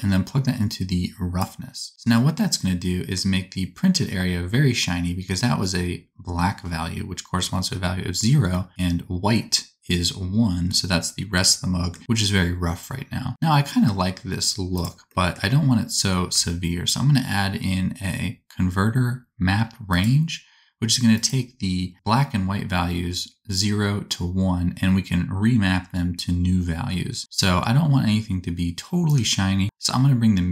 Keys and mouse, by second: 14.8-29.0 middle drag, 16.5 shift+a, 29.0-30.5 shift+drag.